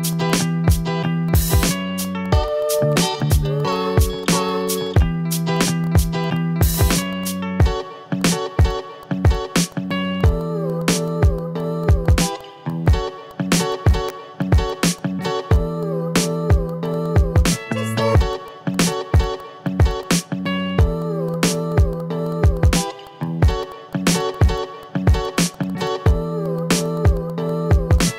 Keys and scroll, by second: 3.2 ctrl+z, 8.5 ctrl+z, 11.2 ctrl+z, 12.6 ctrl+z, 13.0 ctrl+z, 13.5 ctrl+z, 13.6 v, 15.3 ctrl+z, 17.9 v, 21.1 a, 22.2 ctrl+z, 26.7 ctrl+z, 26.9 a.